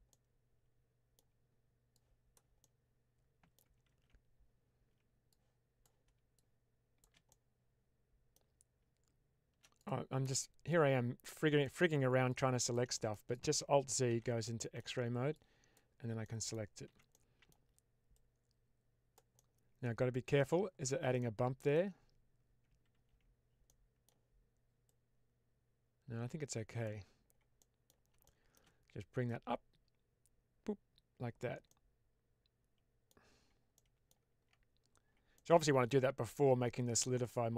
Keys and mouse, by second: 0.0-1.1 middle drag, 1.8 click, 2.6 middle click, 3.8 ctrl+z, 5.2 click, 6.2 click, 7.2-8.2 middle drag, 10.2-11.2 middle drag, 11.5 middle click, 12.2 click, 12.9 middle click, 14.0 alt+z, 14.3 middle click, 15.3 click, 16.2 middle click, 16.8 alt+z, 17.1 middle click, 18.0-19.0 drag, 19.3-20.4 middle drag, 21.2 middle click, 22.8 ctrl+z, 23.7 middle click, 24.7-26.7 drag, 27.6 middle click, 28.3 shift+middle click, 29.1-31.3 drag, 31.6-33.0 middle drag, 33.7 middle click, 34.2 Tab, 35.2-37.5 middle drag.